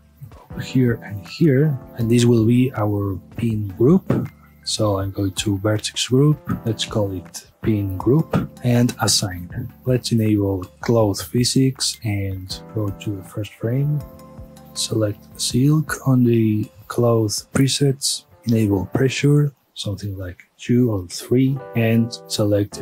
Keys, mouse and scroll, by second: 0.4 ctrl+r, 1.0 right click, 1.2-1.8 middle drag, 1.8 alt+shift+click, 2.0-2.9 scroll down 1, 2.9-4.9 middle drag, 4.9 click, 6.1-8.5 drag, 8.5 Return, 9.1-9.8 drag, 9.8 scroll up 1, 9.9 click, 11.2-14.6 drag, 14.6 scroll up 1, 14.9-16.8 drag, 18.4 scroll down 1, 18.6 click, 19.5-21.1 drag, 21.1 KP_Enter, 21.7-22.8 drag.